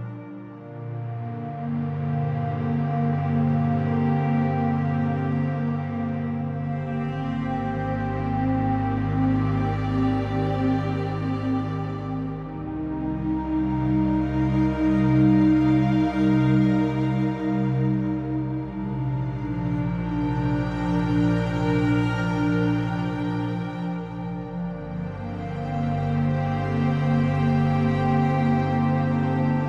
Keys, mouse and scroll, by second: 2.6 click, 4.2-6.8 drag, 7.3 middle click, 7.5-7.9 scroll up 2, 7.9 ctrl+alt+KP_0, 8.4 click, 9.2 r, 12.9 r, 14.1 g, 16.0 click, 16.6 middle click, 16.9-18.2 scroll up 2, 18.2 shift+a, 18.4 scroll down 1, 18.5 middle click, 18.8 g, 21.6 KP_0, 22.4 shift+d, 23.2 g, 23.8 r, 24.9 middle click, 25.4 r, 26.3 s, 28.0 KP_0.